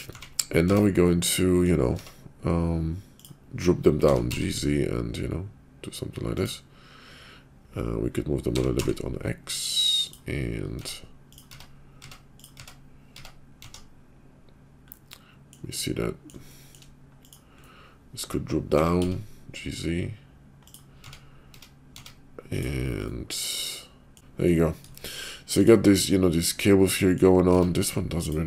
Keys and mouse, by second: 0.0 Tab, 0.6 Tab, 1.3 click, 1.9 Tab, 3.0 click, 4.0 g, 8.5 g, 10.7 Tab, 11.5 Tab, 11.9 Tab, 12.6 Tab, 13.1 Tab, 13.6 Tab, 14.8 click, 15.7 click, 16.0 middle click, 16.5 shift+middle click, 17.2 click, 17.5 middle click, 18.7 g, 20.9 Tab, 21.5 Tab, 21.8 Tab, 22.5 click, 23.0-24.5 middle drag, 24.1 Tab, 24.9 shift+middle click, 26.0-27.2 middle drag, 27.5 Tab, 28.2 click.